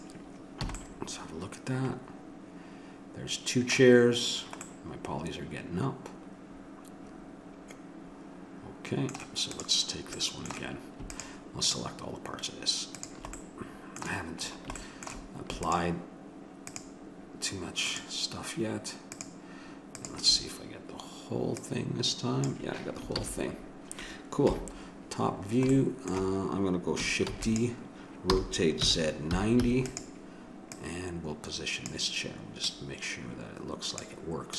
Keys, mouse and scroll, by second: 0.6 a, 0.8-2.7 middle drag, 4.6-6.4 middle drag, 9.6-14.8 drag, 14.8 middle click, 15.6-23.2 drag, 23.2 ctrl+z, 24.5 KP_7, 27.4 shift+d, 28.3 r, 30.8-34.5 drag.